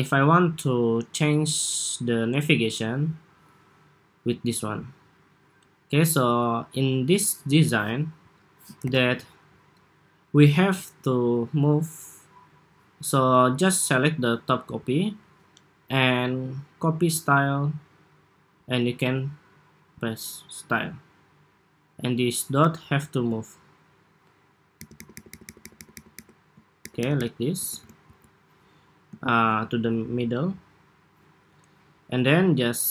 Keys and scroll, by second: 8.5 super+=.